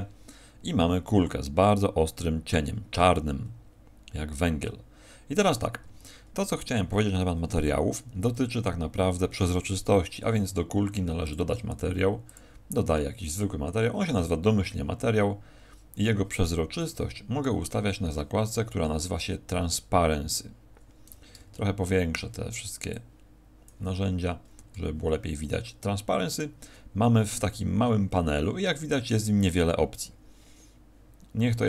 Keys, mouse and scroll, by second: 5.8 Escape, 5.8 scroll up 1, 6.5 right click, 6.9-7.8 scroll up 3, 7.9 scroll down 1, 11.2 click, 12.2 click, 18.4-20.1 scroll down 2, 20.1 scroll down 2, 21.5 ctrl+middle click, 22.9 click, 24.1-26.3 scroll down 12, 26.3 click, 27.2-27.9 scroll down 1, 28.1 scroll down 5.